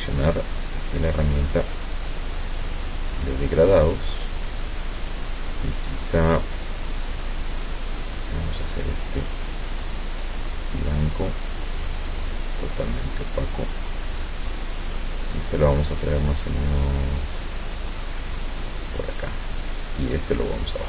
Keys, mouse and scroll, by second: 0.3 click, 2.5-6.8 drag, 7.0 click, 8.2-10.2 drag, 10.8-12.0 drag, 14.5-19.0 drag, 19.8 click.